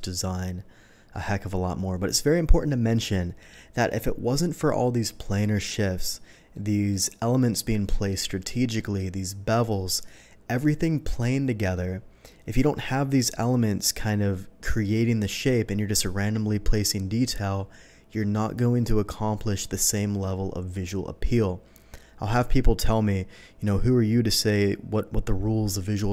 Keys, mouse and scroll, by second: 6.5-6.8 middle drag, 8.7 middle drag, 11.7-12.2 middle drag.